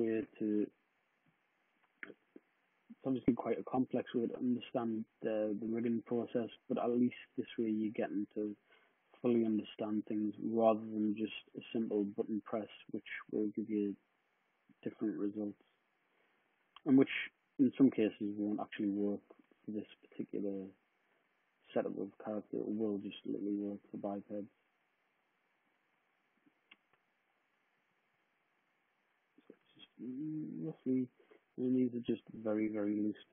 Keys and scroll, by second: 2.3 super+d.